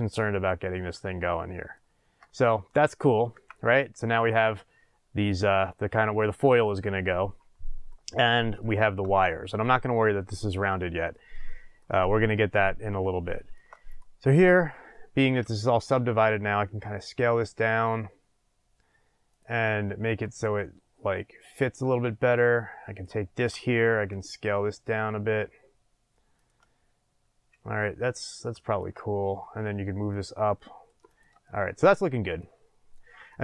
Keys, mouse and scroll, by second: 0.4 click, 0.9-2.9 middle drag, 2.0 scroll down 1, 2.9 click, 3.3 Tab, 3.7-13.8 middle drag, 13.8 click, 15.5-16.7 shift+middle drag, 16.6 s, 19.3 click, 20.2-23.0 drag, 23.9 s, 26.4 click, 26.7 scroll, 28.6-30.1 shift+middle drag, 29.2 scroll, 30.1-31.2 drag, 31.4-33.4 shift+middle drag, 32.4-33.3 scroll up 2.